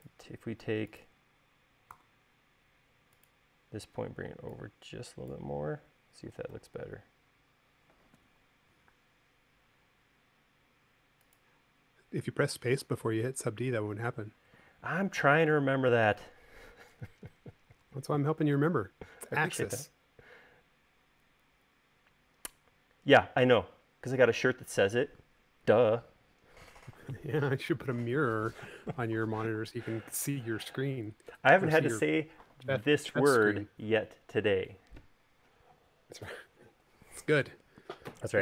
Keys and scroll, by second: 2.8 v, 7.4 u, 9.9 space.